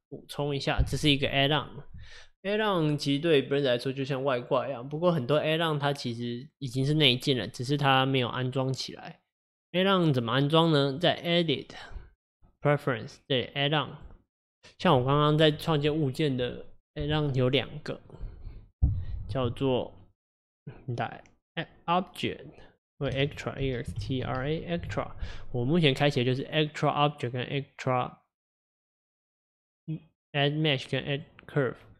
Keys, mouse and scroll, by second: 0.5 click, 11.1-14.1 drag.